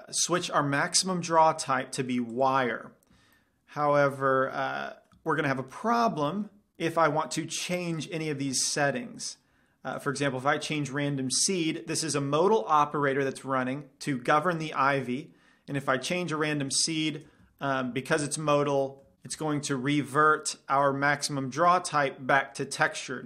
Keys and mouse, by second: 1.5-3.5 drag, 3.6-6.8 middle drag, 7.1-8.1 middle drag, 8.1-11.9 drag, 16.1-17.9 drag, 17.9-18.5 middle drag, 19.5-23.2 middle drag.